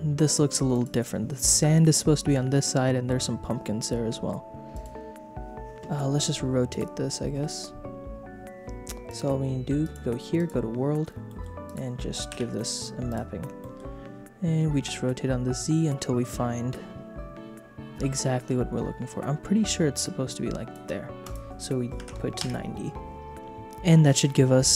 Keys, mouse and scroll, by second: 0.3 click, 0.7 click, 4.7 click, 6.7 click, 9.0 click, 9.8 click, 11.2 middle click, 11.6 click, 12.3 ctrl+t, 12.5 middle click, 13.1 click, 13.6 middle click, 14.8-16.3 shift+drag, 16.3-20.7 shift+middle drag, 21.2-22.4 drag.